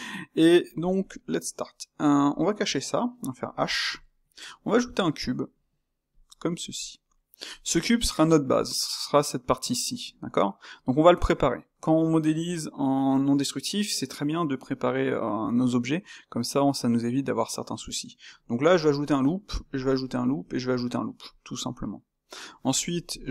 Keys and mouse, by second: 2.2 click, 3.4 h, 4.0-4.6 shift+middle drag, 6.1 shift+a, 6.8-17.4 shift+middle drag, 17.4 Tab, 18.6 ctrl+r, 19.4 ctrl+r, 21.6 middle click, 22.4 Tab, 22.8 click.